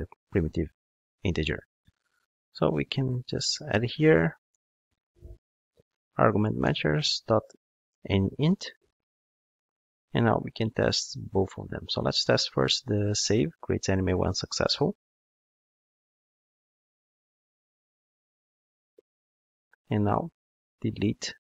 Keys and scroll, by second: 1.1 ctrl+Tab, 6.3 Return, 13.0 ctrl+shift+d.